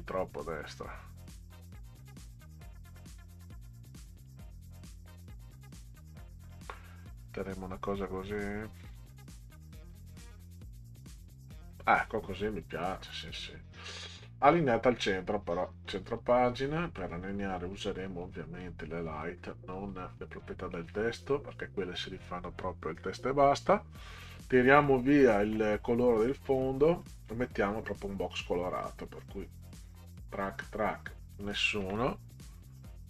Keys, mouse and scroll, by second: 2.9 click, 4.3-6.5 drag, 8.9 click, 16.0 click, 19.0 drag, 19.9 click, 21.5 click, 27.0 drag, 28.8 click, 30.4 middle click, 31.3 click, 32.9 click.